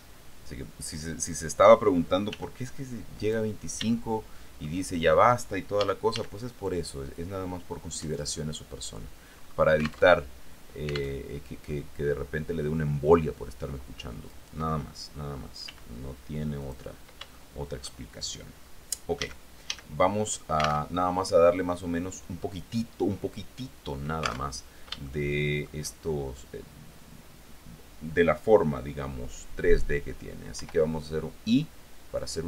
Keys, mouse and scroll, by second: 0.0 click, 2.5 g, 3.4 click, 4.1-5.3 shift+middle drag, 6.0 a, 9.5-10.4 scroll up 2, 10.2 alt+Tab, 11.4 alt+Tab, 14.5 right click, 15.8 g, 16.8 click, 17.5 shift+middle click, 19.4 a, 21.0 alt+Tab, 24.7 alt+Tab, 25.2 shift+click, 30.8 i.